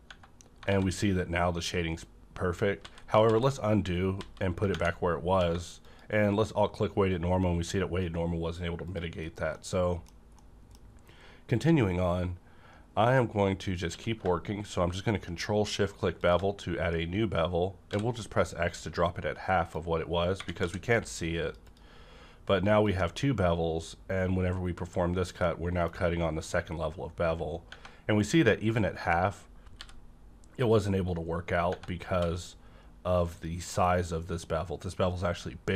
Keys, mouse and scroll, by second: 0.0 Tab, 0.6 alt+a, 2.7 ctrl+z, 3.2 ctrl+z, 4.1 ctrl+z, 4.7 Right, 5.2 q, 5.3 Right, 5.8 click, 8.9 click, 9.3 scroll down 1, 9.5 middle click, 10.1 scroll down 1, 10.3 middle click, 11.2 scroll up 1, 13.9 scroll up 1, 13.9 q, 16.2 shift+click, 17.9 x, 19.1-19.7 scroll down 1, 19.7 click, 19.7-21.7 drag, 20.6 d, 22.8-27.7 drag, 25.4-28.6 middle drag, 28.6-29.8 scroll up 1, 29.8 b, 31.1-31.7 scroll up 1, 31.7 scroll up 1, 32.1 d, 33.3 click.